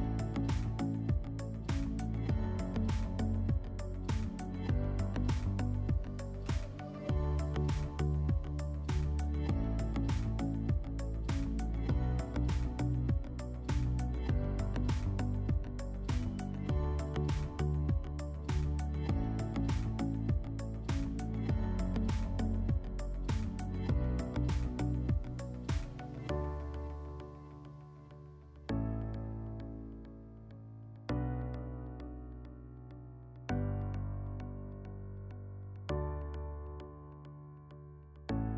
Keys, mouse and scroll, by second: 0.5 click, 2.2 click, 3.1 ctrl+click, 4.3 click, 6.1 click, 7.2 ctrl+click, 8.0 click, 11.6 click, 12.9 ctrl+click, 14.1 click, 18.4 click, 22.3 click, 22.8 click, 23.9 ctrl+click, 25.0 click, 26.5 alt+middle click, 28.2 click, 29.3 ctrl+click, 30.4 click, 32.4 click, 33.7 ctrl+click, 34.8 click.